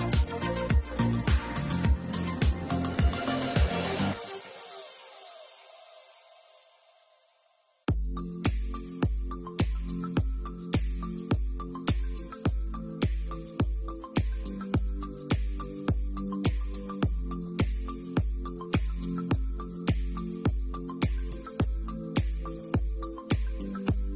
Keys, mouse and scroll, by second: 0.0 middle click, 0.7 shift+middle click, 0.9 middle click, 1.5 shift+middle click, 2.1 click, 2.7 middle click, 3.6 Tab, 6.6 click, 8.4 middle click, 10.1 click, 11.0 middle click, 11.3 shift+middle click, 11.7 middle click, 12.4 Tab, 13.4 scroll up 3, 13.7 middle click, 14.4 ctrl+r, 16.4 scroll up 2, 18.3 ctrl+r, 20.1 shift+middle click, 20.6 middle click, 20.9-21.5 scroll down 3, 21.3 middle click, 23.6 alt+shift+click.